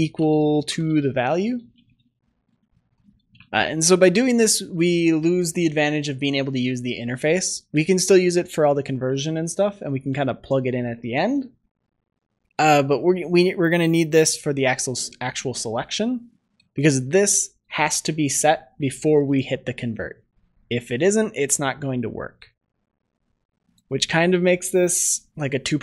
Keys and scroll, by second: 3.8 ctrl+s.